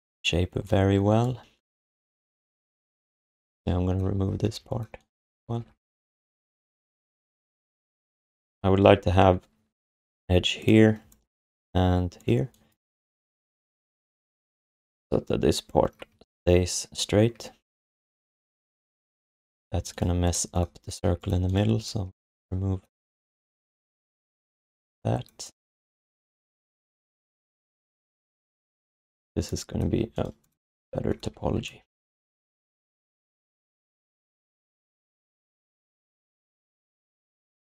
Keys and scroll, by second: 0.5 space, 5.4 alt+shift+d, 16.1 3, 17.3 1, 19.7 q, 24.0 alt+shift+d, 29.9 q, 31.3 g, 32.8 alt+shift+d, 34.5 BackSpace, 37.5 q.